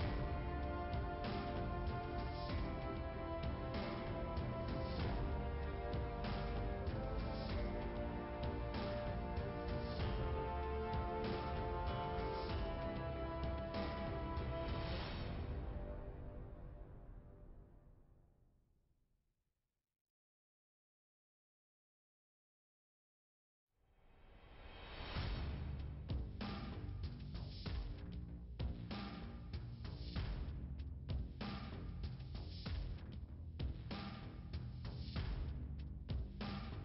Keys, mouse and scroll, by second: 0.6 click, 1.8 click, 2.2 middle click, 3.0 click, 4.6 right click, 5.0 scroll up 2, 7.4-8.0 scroll up 1, 8.6 click, 8.7 scroll up 1, 9.1 right click, 9.7 click, 11.3 click, 13.3 click, 15.6 Delete, 17.4 click, 19.7 click, 21.3 click, 26.4 click, 28.5 click, 28.5 click, 29.5 scroll down 2, 31.9 click, 32.8 click, 33.9 click, 34.7 click.